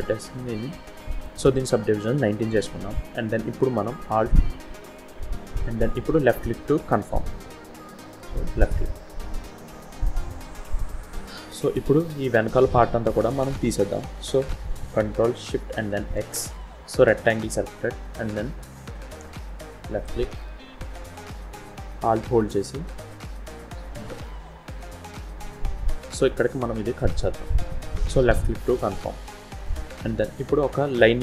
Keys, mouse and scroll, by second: 9.2-9.7 scroll down 2, 9.7 scroll up 1, 10.4-10.8 scroll up 1, 10.8-11.8 scroll down 1, 16.1 ctrl+shift+x, 29.4 scroll up 4, 30.0-31.2 scroll down 2.